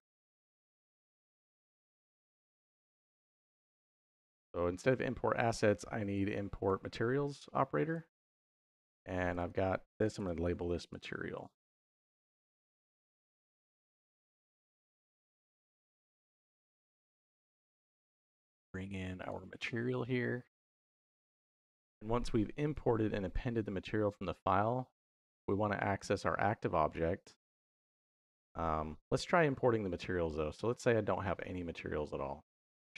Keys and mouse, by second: 1.6 middle click, 4.1-7.8 drag, 9.1 click, 9.2-14.2 drag, 11.3 BackSpace, 11.5 BackSpace, 11.8 BackSpace, 11.9 BackSpace, 16.1 middle click, 17.1-19.3 drag, 21.4 middle click, 22.5 click, 25.1 click.